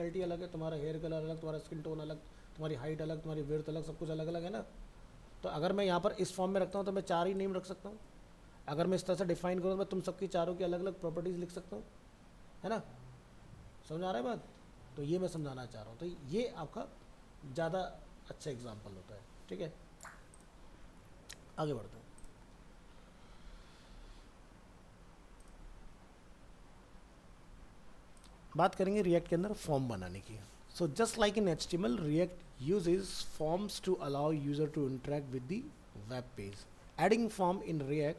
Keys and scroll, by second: 21.0 alt+Tab.